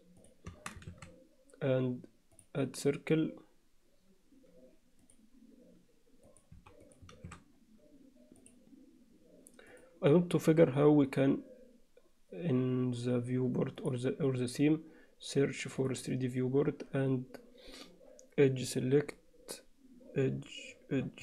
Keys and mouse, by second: 0.5 Tab, 0.9 shift+a, 6.3 click, 6.6 x, 7.3 shift+a, 8.4-9.9 drag.